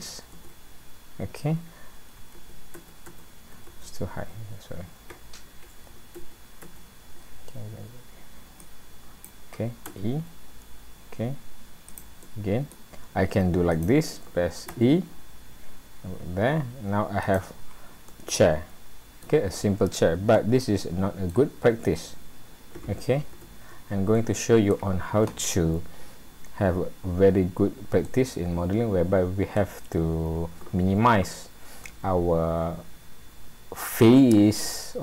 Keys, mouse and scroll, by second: 0.4 ctrl+z, 0.9-1.9 scroll up 7, 2.4 ctrl+z, 3.7 z, 6.2 ctrl+z, 6.6 ctrl+z, 8.6 click, 9.9 e, 12.2 middle click, 13.7 click, 14.7 e, 17.7-18.1 scroll down 4, 18.1 middle click, 19.4-20.2 scroll down 3, 20.4 middle click, 21.8-22.4 scroll up 3, 23.4 ctrl+z, 24.2 middle click, 26.2-27.2 scroll up 4, 28.1 middle click, 31.9 middle click.